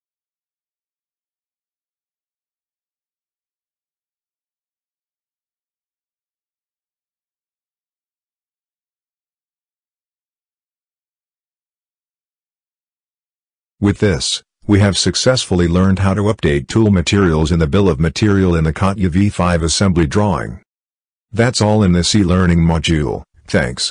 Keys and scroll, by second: 0.9 ctrl+v, 2.1 ctrl+v, 3.1 ctrl+v, 3.9 ctrl+v, 4.8 ctrl+v, 5.7 ctrl+v, 6.8 ctrl+v, 7.8 ctrl+v, 8.9 ctrl+v, 9.7 ctrl+v, 15.9 ctrl+s.